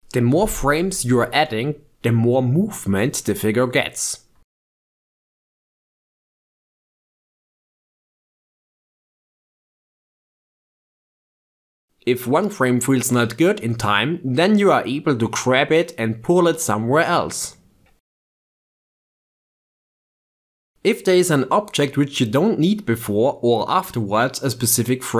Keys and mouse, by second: 0.1 click, 2.5-2.9 drag, 3.2 click, 5.2-5.6 drag, 5.8 click, 7.3 click, 9.3 click, 10.0 shift+space, 11.8 shift+space, 13.4-14.1 drag, 14.3 click, 15.4 click, 16.4-17.9 drag, 17.9 s, 19.5 shift+space, 19.9 shift+space, 20.6 a, 21.8-24.2 drag, 24.4 g.